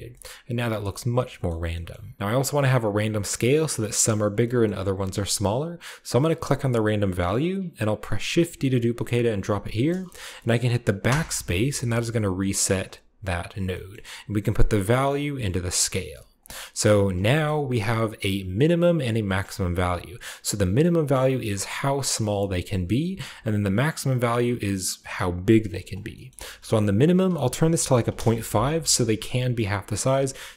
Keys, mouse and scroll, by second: 0.7-2.2 shift+middle drag, 1.0-2.2 shift+scroll down 1, 2.9-4.3 drag, 4.3-4.9 middle drag, 4.3-6.3 scroll up 1, 5.1-6.4 middle drag, 6.4 click, 8.1 shift+d, 9.3 middle click, 9.4 click, 9.7 typing, 12.2 click, 12.7 click, 13.7-15.6 scroll up 1, 14.3-15.6 drag, 15.4-17.6 typing, 15.9-16.2 scroll down 1, 16.2 drag, 16.9 click, 17.1-18.2 middle drag, 17.3-18.0 scroll up 1, 18.0-19.0 scroll up 1, 18.2 click, 18.8-19.5 typing, 19.7-22.8 shift+middle drag, 23.2-25.6 shift+middle drag, 25.9-26.9 scroll up 1, 26.0-26.7 typing, 26.2-28.7 shift+drag, 26.9-27.8 shift+scroll up 1, 27.8-28.2 scroll up 1, 27.8 typing, 28.0 Return, 28.7-30.5 scroll up 1, 29.5 shift+middle drag, 29.5 typing, 30.0-30.5 middle drag.